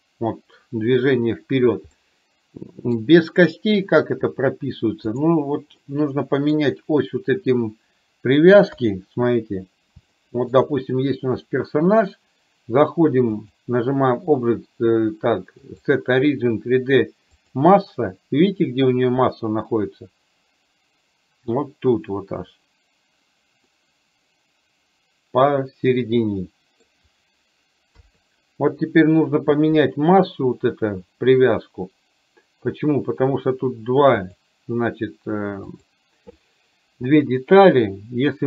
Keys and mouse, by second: 2.1-3.1 middle drag, 5.2 click, 5.8-6.6 middle drag, 8.8 KP_3, 10.2 shift+middle click, 13.5-17.7 drag, 23.7-27.0 middle drag, 28.0 KP_3, 34.3 click, 35.7 click.